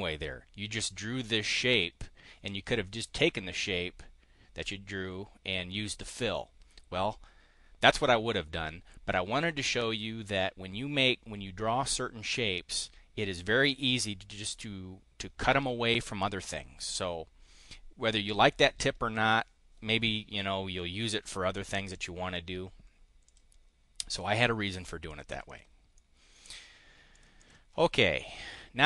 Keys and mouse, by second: 23.1 click, 24.1 click, 25.1 click, 25.4 click, 25.9-27.2 drag, 27.3 click.